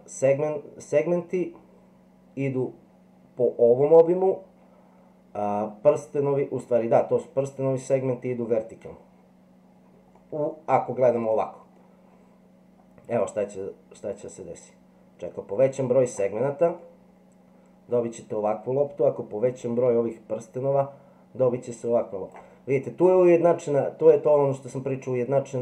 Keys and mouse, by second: 10.2-11.8 middle drag, 13.2-16.1 drag, 16.8-18.0 middle drag, 19.4-22.3 drag.